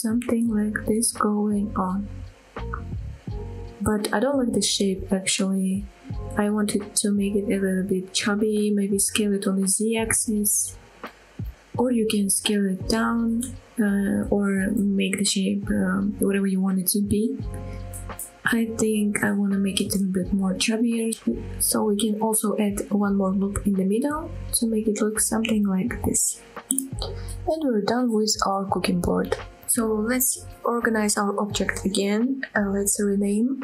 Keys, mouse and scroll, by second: 0.7 click, 1.1 middle click, 2.0 middle click, 2.3-2.8 scroll up 4, 2.8 middle click, 3.6 middle click, 4.5 middle click, 5.3 middle click, 6.5 s, 7.5 z, 12.8 click, 13.0 middle click, 13.7-15.3 middle drag, 15.5 g, 15.8 z, 17.0 shift+click, 17.3 middle click, 18.4 middle click, 19.6 scroll down 1, 20.0 shift+middle click, 20.4 middle click, 20.8 middle click, 21.1 shift+middle click, 21.7 ctrl+r, 23.3 right click, 23.6 middle click, 24.0 middle click, 24.9 middle click, 25.4-26.7 middle drag, 27.0-27.4 scroll down 1, 27.4 middle click, 28.0 Tab, 28.3 click, 28.5 scroll down 2, 28.7 middle click, 29.3-29.7 middle drag, 29.8 scroll up 2, 30.2 shift+middle drag, 30.9 click, 32.5 shift+click, 33.4 click.